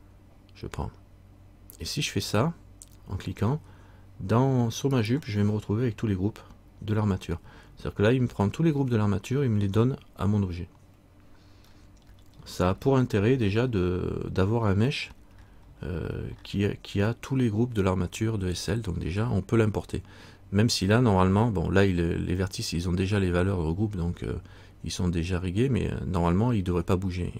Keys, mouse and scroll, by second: 5.2 right click, 11.8-12.2 scroll up 1, 14.8-17.0 scroll down 1.